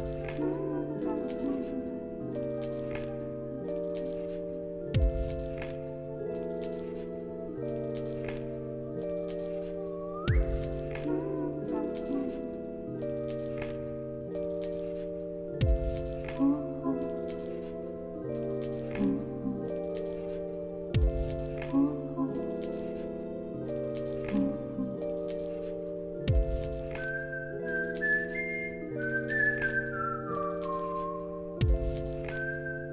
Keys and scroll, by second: 10.7 ctrl+s, 21.0 space, 23.2 space, 23.4 ctrl+s, 25.6 v.